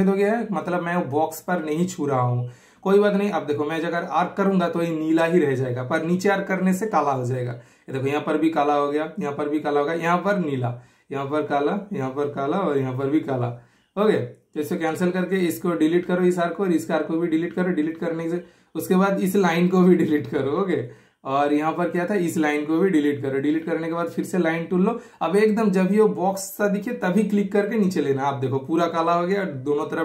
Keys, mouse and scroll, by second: 0.1 super+click, 1.3 super+click, 1.3 typing, 6.0 super+click, 6.0 typing, 7.9 super+click, 7.9 typing, 14.4-15.2 typing, 14.7 super+right click, 15.3 super+click, 16.4 super+Delete, 17.1 super+click, 17.5 super+Delete, 19.1 super+Delete, 19.1 typing, 19.3 super+scroll up 1, 19.3 super+scroll down 1, 20.0 super+click, 21.3 super+Delete, 22.1 super+middle click, 22.9 super+click, 23.3 super+Delete, 24.0 click, 25.0 super+click, 26.1-27.7 super+middle drag, 27.5-27.9 typing, 27.9 super+click, 29.1 super+scroll down 1, 29.3 super+scroll up 1.